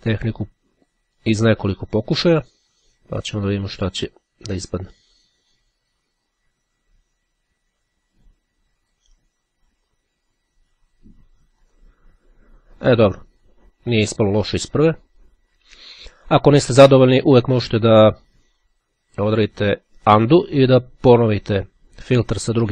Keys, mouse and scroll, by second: 0.6-1.8 drag, 3.4 click, 11.8 click.